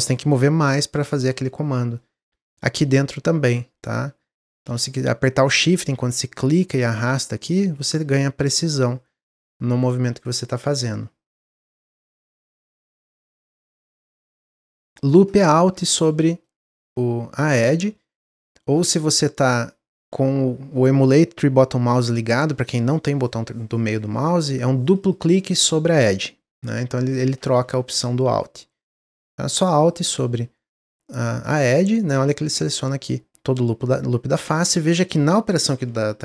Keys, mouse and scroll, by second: 2.9-8.7 shift+drag, 12.9 click, 13.2-15.2 middle drag, 15.2 alt+click, 15.8-17.4 middle drag, 17.4 alt+click, 18.7 click, 18.9 click, 19.3 click, 19.5 click, 24.8 click, 25.0 click, 26.9 alt+click, 27.1 alt+click, 28.3-29.7 middle drag, 29.7 alt+click, 30.7-33.7 middle drag.